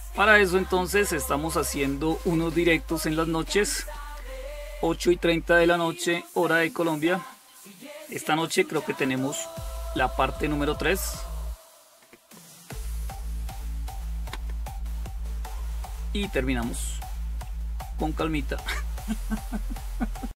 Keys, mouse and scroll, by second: 0.9-19.8 scroll down 1, 19.8 click, 20.2 click.